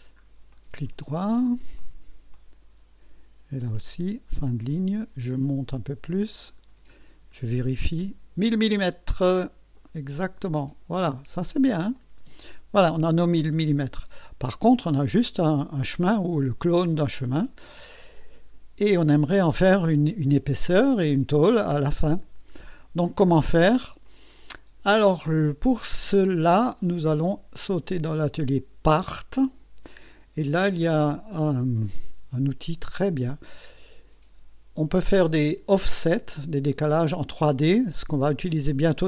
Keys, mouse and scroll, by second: 0.6 right click, 1.3 right click, 1.8 right click, 2.4 right click, 4.4 click, 6.5 click, 7.0-8.0 scroll down 3, 9.3 middle click, 10.2-11.1 right drag, 12.0 click, 12.2 space, 14.0 scroll up 2, 15.3 middle click, 16.7-17.7 right drag, 17.9 scroll up 2, 18.9 scroll up 2, 19.3-19.6 scroll down 2, 23.3 scroll up 2, 24.1 right click, 27.8 click, 29.0 click, 31.5 click, 33.6 click.